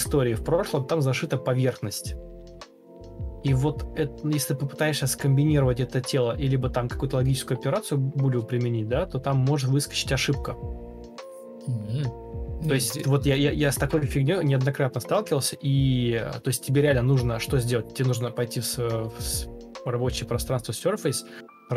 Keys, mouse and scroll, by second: 0.7 shift+click, 2.4-3.1 typing, 3.2 Escape, 5.0 ctrl+click, 7.8 ctrl+e, 8.2 ctrl+space, 8.8 ctrl+space, 9.3 ctrl+d, 10.5 ctrl+e, 10.5 ctrl+space, 11.5 ctrl+space, 12.1 ctrl+u, 12.6 Escape, 16.6 Down, 21.2 shift+click, 21.5 shift+click.